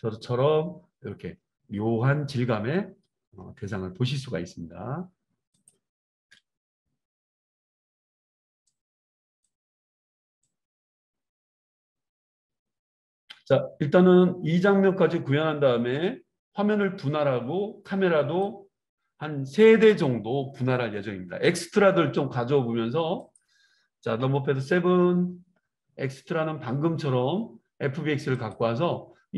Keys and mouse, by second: 0.0-5.8 drag, 5.8-8.6 middle drag, 6.3 KP_0, 8.6-23.5 drag, 23.5-28.3 middle drag, 24.2 KP_7, 28.3-29.3 drag.